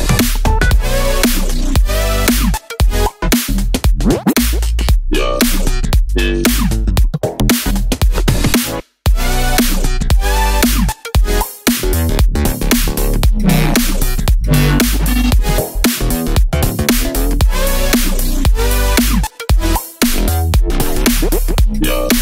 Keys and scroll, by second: 2.7 Left, 2.9 Down, 4.6 super+c, 4.6 super+v, 10.2 Left.